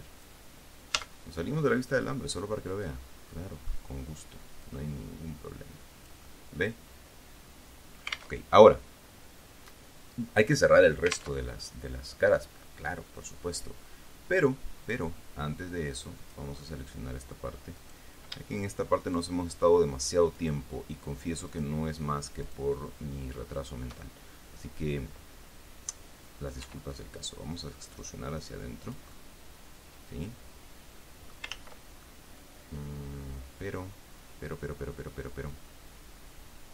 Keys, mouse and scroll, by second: 1.3 z, 1.9-4.2 middle drag, 5.0-8.7 drag, 8.7 alt+Tab, 11.8 alt+Tab, 11.9-15.0 alt+drag, 16.5 click, 18.1 right click, 19.3 shift+right click, 20.7 shift+right click, 21.8 shift+right click, 22.8 shift+right click, 23.9 shift+right click, 24.4-25.5 shift+middle drag, 27.0 e, 29.2 click, 29.5-31.8 middle drag, 31.9 ctrl+z, 32.4-36.7 ctrl+middle drag.